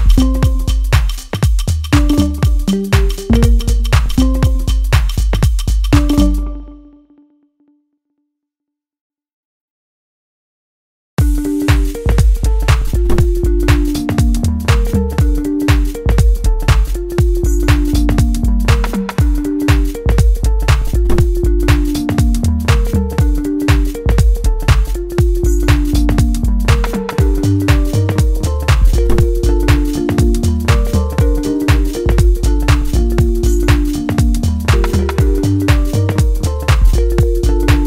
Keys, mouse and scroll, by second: 0.4-2.7 middle drag, 2.7 click, 3.0 middle click, 4.0-4.9 scroll up 1, 4.9 click, 7.0-7.5 scroll down 1, 7.5 middle click, 8.0-8.8 scroll down 1, 9.1-10.7 right drag.